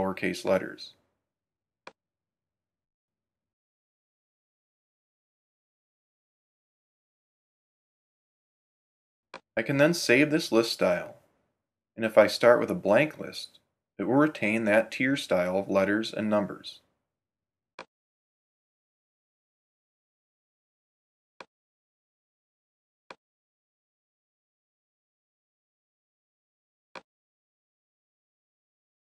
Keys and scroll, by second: 23.6 BackSpace, 28.8-29.0 typing.